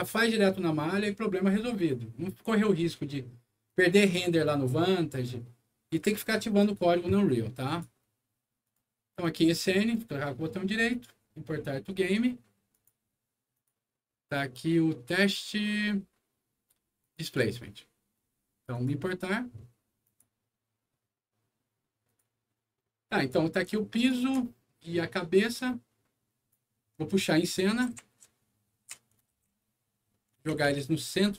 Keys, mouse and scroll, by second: 3.6 click, 7.6 click, 8.6 right click, 9.1 click, 9.3 click, 9.8 right click, 10.8 click, 12.6 click, 13.5 click, 16.9 click, 17.2 click, 18.6 click, 20.0 click, 22.0 click, 23.1 click, 23.9 ctrl+click, 25.0-26.4 ctrl+drag, 27.3-28.7 typing, 27.4-28.8 right drag, 29.2 alt+w, 30.0 alt+middle click, 30.4 alt+w, 30.6 z.